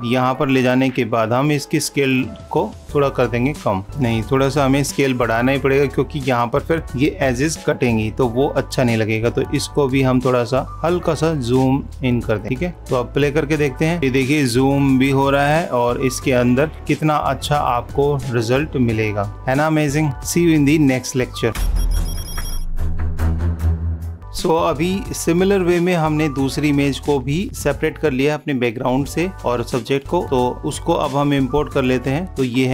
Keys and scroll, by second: 7.9 super+=, 8.3 -.